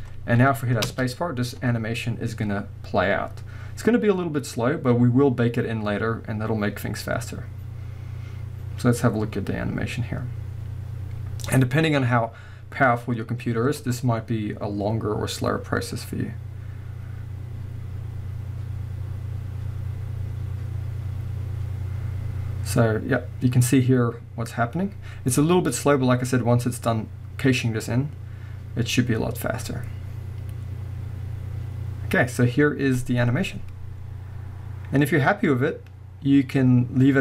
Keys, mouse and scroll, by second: 0.8 space.